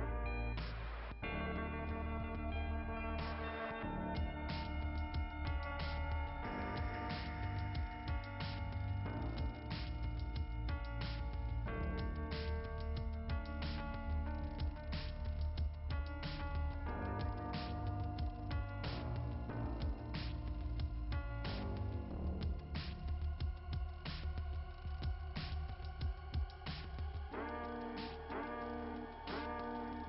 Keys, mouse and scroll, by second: 0.5 click, 3.4 click, 4.3 click, 9.0 click, 17.3 click, 18.8 click, 19.8 click, 21.6 click, 24.1 click, 25.5 click, 27.1 click, 28.8 click.